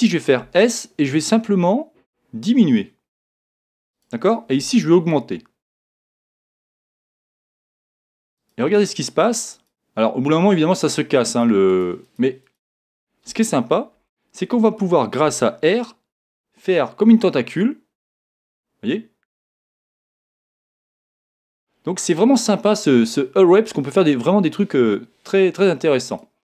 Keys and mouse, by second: 0.4 s, 4.0 click, 6.3-14.7 drag, 15.2 r, 26.2-26.4 drag.